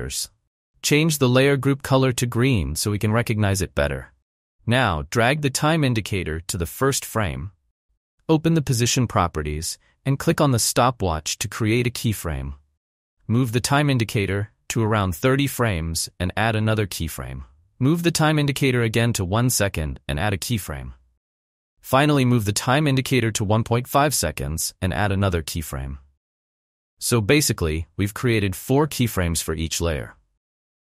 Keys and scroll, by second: 9.8 p.